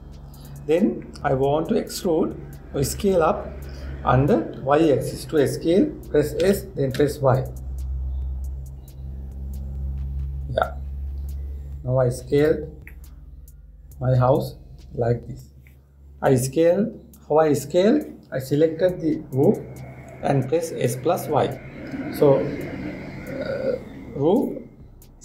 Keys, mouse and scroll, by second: 7.1 s, 13.6-16.6 middle drag, 16.8 scroll up 1, 16.8-17.3 scroll down 1, 17.3 scroll up 1, 17.4-20.4 scroll down 1.